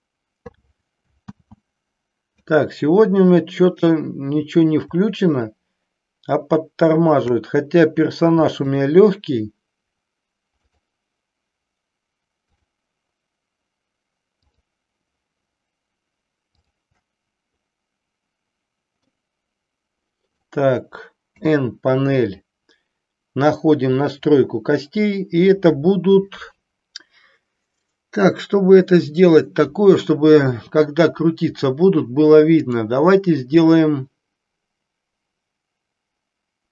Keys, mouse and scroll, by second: 1.2 ctrl+click, 1.3 ctrl+z, 5.4-6.8 shift+drag, 8.7-10.1 shift+drag, 10.7-12.1 shift+drag, 12.4-14.0 shift+drag, 14.4-16.1 shift+drag, 16.6-17.9 shift+drag, 19.1-20.4 middle drag, 21.2 n, 32.5-36.7 drag.